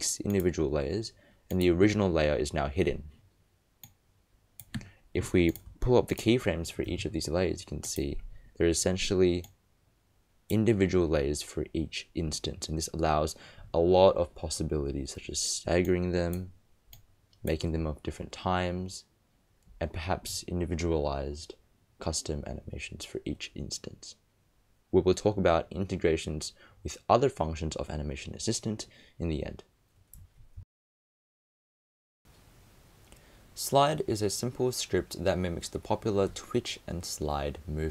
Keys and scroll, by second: 6.9 shift+u.